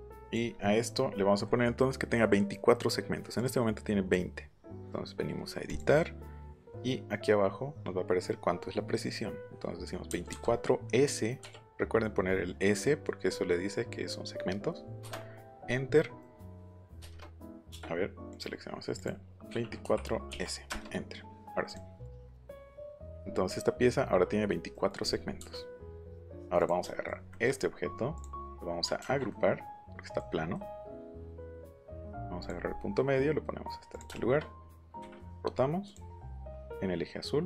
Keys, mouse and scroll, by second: 0.2 click, 3.3 click, 5.6 click, 10.0 KP_2, 10.3 KP_4, 11.3 s, 15.0 Return, 16.2 middle click, 17.0 Return, 18.3 click, 18.9 click, 19.8 4, 20.3 s, 20.6 Return, 21.6 click, 22.0 click, 22.4 click, 22.8 click, 24.7 middle click, 24.7 scroll up 1, 25.0 middle click, 25.0-25.3 scroll down 1, 26.5 click, 27.5 middle click, 28.1 click, 28.3 middle click, 29.0 ctrl+g, 32.4 click, 33.9 click, 35.8 click, 36.4 click.